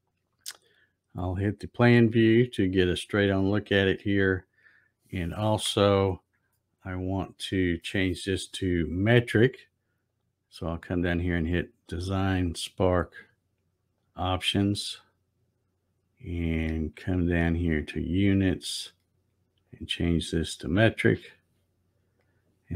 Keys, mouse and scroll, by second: 1.4 click, 6.7 shift+middle click, 10.1 click, 12.8 click, 14.0 click, 17.8 click, 19.6 click, 21.0 click, 22.2 click.